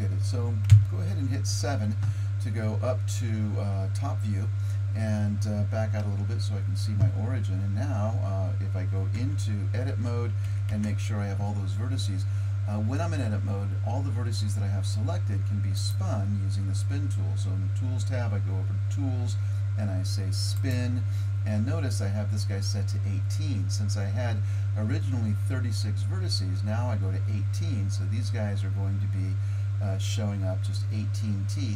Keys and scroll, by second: 0.7 KP_7, 9.2 Tab, 10.5 a, 10.7 a.